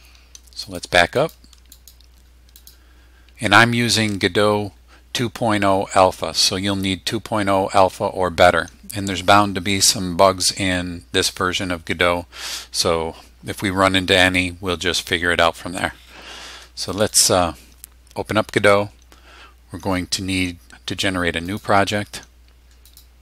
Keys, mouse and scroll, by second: 0.6 click, 1.1 click, 1.7 click, 2.5 click, 16.9 click, 21.4 click, 22.8 click.